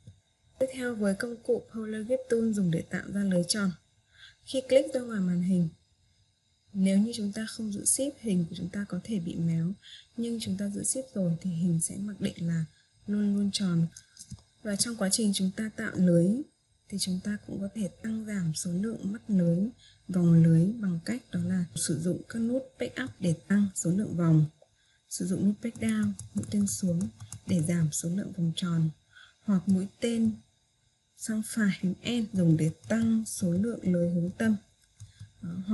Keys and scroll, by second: 22.3 Page_Up, 26.2 Page_Down, 32.6 End.